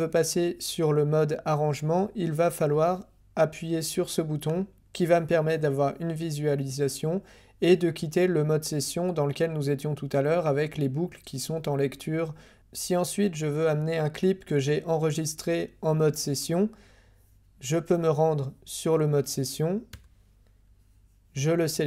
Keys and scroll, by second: 19.9 Tab.